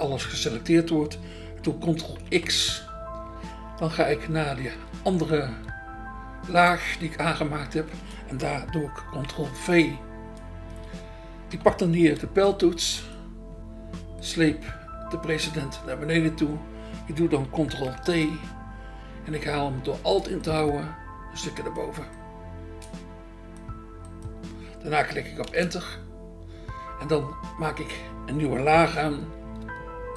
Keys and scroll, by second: 2.2 ctrl+x, 4.6 BackSpace, 5.5 BackSpace, 9.2 ctrl+v, 12.3 BackSpace, 12.8 BackSpace, 17.8 ctrl+t, 25.5 Return.